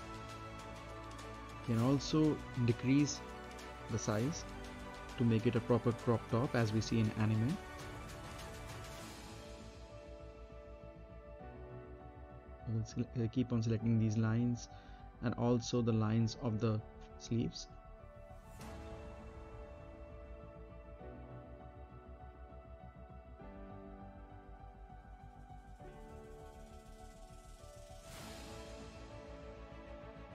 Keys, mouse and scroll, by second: 3.0 Up, 4.2 space, 6.0-10.3 right drag, 10.3-11.7 middle drag, 11.7 Up, 12.9 space, 14.5-15.8 right drag, 15.8-16.3 scroll up 1, 16.3 middle click, 16.7-17.1 scroll down 1, 17.1 middle click, 17.3 right click, 17.7 scroll down 1, 17.9 middle click, 18.2 right click, 19.6 click, 20.3 middle click, 20.6 scroll down 1, 22.4 click, 24.8 shift+click, 27.0 shift+click, 27.7 middle click, 28.8 shift+click, 29.4-30.0 scroll up 1.